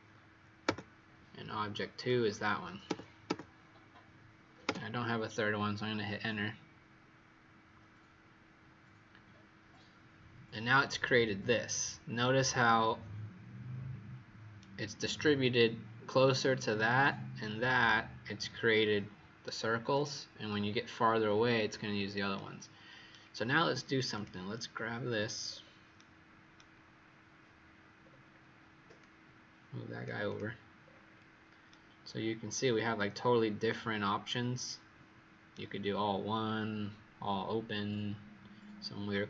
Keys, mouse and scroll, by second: 1.9 click, 2.8 Return, 3.2 Return, 4.6 Return, 11.5-12.1 scroll up 2, 12.1 right click, 24.1 click, 25.3-25.9 scroll down 4, 25.9 right click, 27.9-28.9 scroll down 3, 28.9 click, 30.8-31.6 scroll up 2, 31.6 right click, 31.6-32.3 scroll up 7.